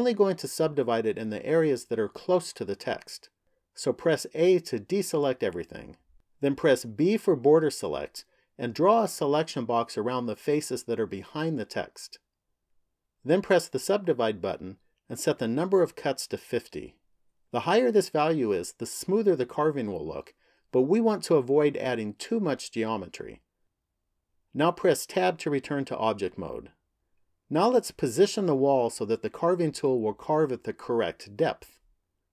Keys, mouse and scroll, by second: 4.1 a, 6.6 b, 13.8 click, 16.0 click, 25.0 Tab.